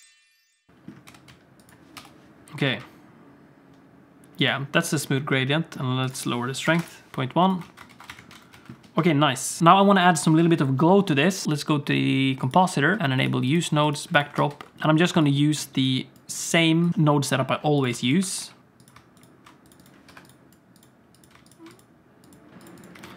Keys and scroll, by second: 0.7 ctrl+space, 1.2 g, 2.0 KP_0, 2.7 g, 7.7 alt+a, 8.0 ctrl+s, 8.1 alt+shift+z, 8.6 ctrl+s, 9.6 space, 10.5 ctrl+s.